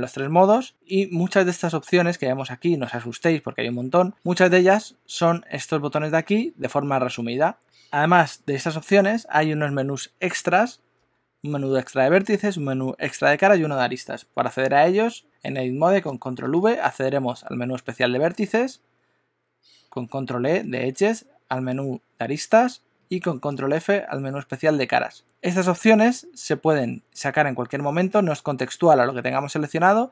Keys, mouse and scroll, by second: 16.4 super+v, 21.0 super+e, 23.6 super+f.